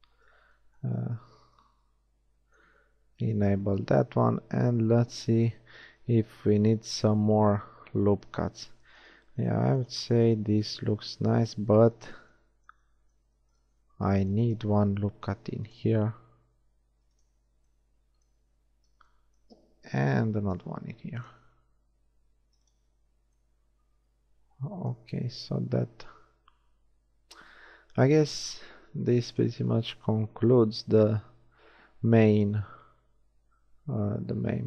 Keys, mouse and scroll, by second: 0.1 middle click, 1.5 Tab, 2.3 z, 10.9 shift+Tab, 15.0 ctrl+r, 15.9-17.1 drag, 17.6 Tab, 18.7 Tab, 20.3 ctrl+r, 23.0 Tab, 29.7-31.5 middle drag.